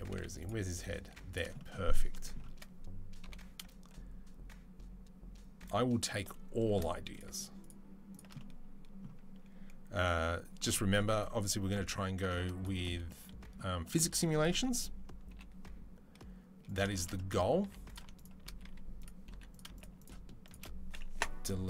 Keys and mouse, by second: 3.0 i, 7.4 shift+click, 8.1-18.7 middle drag, 9.7 c, 15.1 i, 17.4 3, 18.4 2, 18.7 click, 18.8 middle click, 19.1 3, 19.3 click, 19.5 shift+middle click, 20.2 shift+click, 20.3-21.6 shift+middle drag, 20.9 Delete.